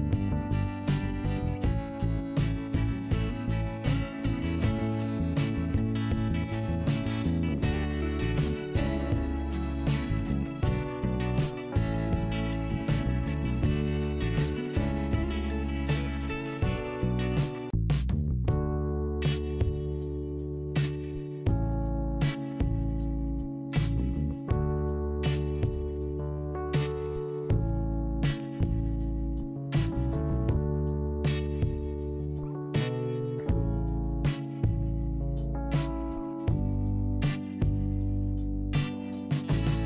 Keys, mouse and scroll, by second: 1.1 click, 3.7-4.2 scroll down 2, 5.6 l, 6.7 p, 7.7 click, 8.5 click, 11.5 t, 12.5-12.9 scroll up 2, 14.8 click, 15.4 click, 17.0 click, 17.6 click, 21.0 scroll down 1, 22.3 p, 23.4 click, 24.5 scroll down 1, 25.5 scroll up 1, 26.2 click, 26.5 scroll down 1, 27.0 scroll up 1, 27.7 click, 33.4 click, 36.3 scroll up 1, 39.1 click, 39.7 click.